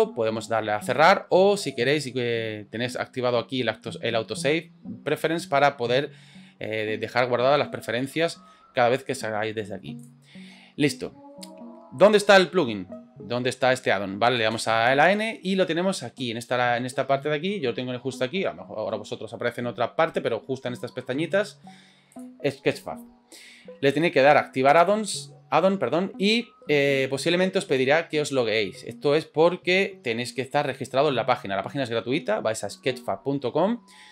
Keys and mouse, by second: 24.7-25.7 drag.